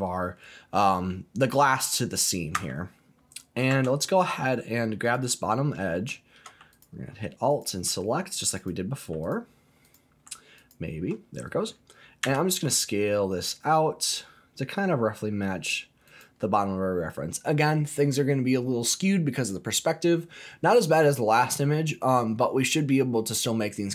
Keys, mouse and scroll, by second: 2.6 Tab, 3.7 Tab, 5.0 click, 6.7 alt+click, 7.5 click, 8.6 click, 9.2 alt+click, 9.8 click, 10.6 alt+click, 12.2 s, 16.0 click, 20.9-21.6 scroll down 2, 21.6-23.3 scroll up 2, 23.3-23.9 scroll down 1.